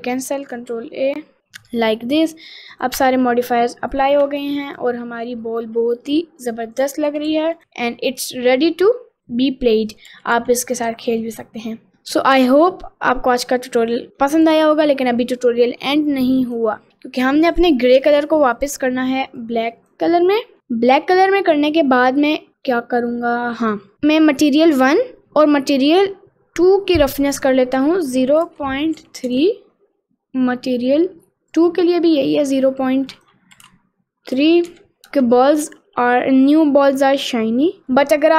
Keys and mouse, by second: 1.2 ctrl+a, 1.4 ctrl+a, 1.8 middle click, 2.2 click, 2.5 middle click, 3.2 Tab, 3.3 middle click, 4.0 click, 4.8 click, 5.0-6.6 middle drag, 6.9 click, 7.2 r, 7.4 r, 9.2 middle click, 9.5 r, 10.2 r, 11.8 middle click, 12.0 middle click, 12.5 click, 12.9 middle click, 14.1 middle click, 14.9 middle click, 16.5 click, 17.5 click, 18.7 click, 20.5 middle click, 20.6 middle click, 21.4 middle click, 21.9 middle click, 22.5 middle click, 24.9 click, 28.2-29.3 drag, 31.6 click, 33.2-35.2 drag, 35.7 middle click, 36.6-37.8 middle drag, 38.0 middle click.